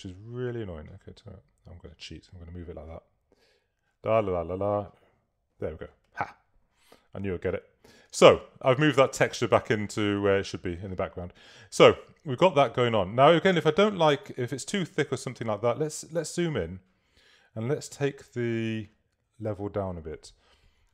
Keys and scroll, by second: 15.6 super++.